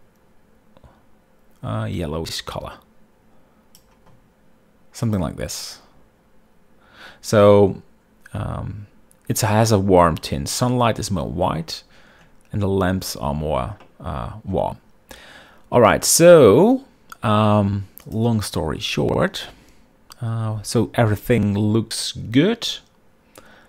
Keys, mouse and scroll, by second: 14.4-15.1 shift+middle drag, 18.7 click.